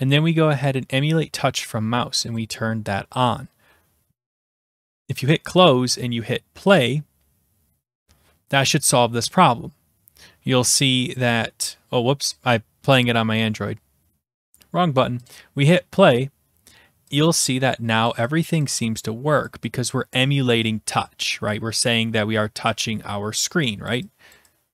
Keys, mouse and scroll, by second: 2.4 click, 5.3 click, 6.8 click, 12.3 click, 15.4 click, 18.1 click, 18.5 click, 18.8 click, 19.5 click, 19.9 click, 21.2 click, 22.8 click, 23.9 click, 24.3 click.